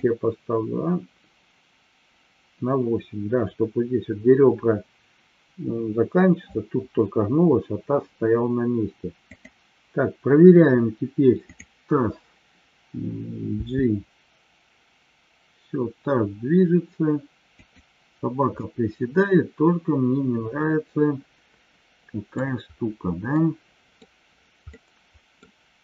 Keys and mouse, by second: 18.6-22.3 middle drag, 23.4-23.9 middle drag, 24.6-25.4 middle drag.